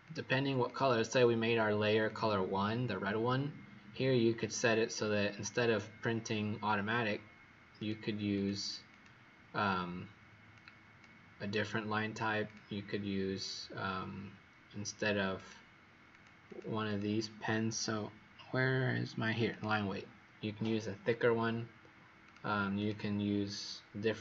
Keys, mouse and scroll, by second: 0.6 click, 2.0 click, 8.3 click, 8.8 click, 10.5 click, 16.4 click, 16.8 click, 19.5 click, 22.7 click.